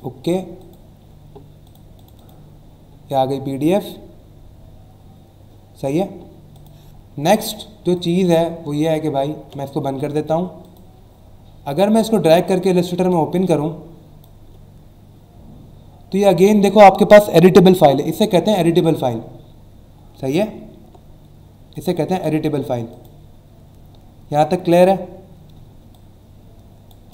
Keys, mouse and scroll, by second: 0.6 click, 1.6 click, 1.9 click, 4.3-4.8 scroll down 1, 4.9-5.3 scroll down 1, 5.8 scroll down 1, 6.5 click, 7.9 click, 9.4 ctrl+w, 10.6 click, 11.6 click, 16.1 click, 18.2 alt+scroll up 1, 20.4 alt+scroll down 1, 21.7 click, 22.3 alt+scroll up 1, 22.9 click, 25.5 space, 25.9 click, 26.0 space.